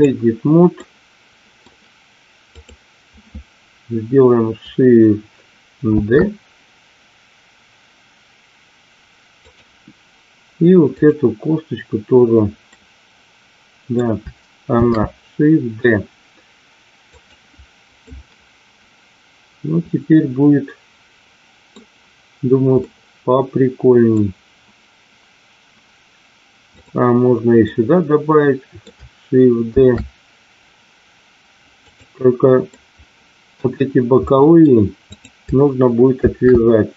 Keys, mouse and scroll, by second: 0.8 middle click, 6.1 shift+d, 10.8 click, 12.8-14.0 middle drag, 14.7 shift+d, 17.1 click, 18.1-20.4 middle drag, 20.8 middle click, 22.8-24.1 middle drag, 26.7 click, 27.6-28.8 middle drag, 29.8 shift+d, 32.8 middle click, 34.2 middle click, 35.1 click, 36.2 shift+d.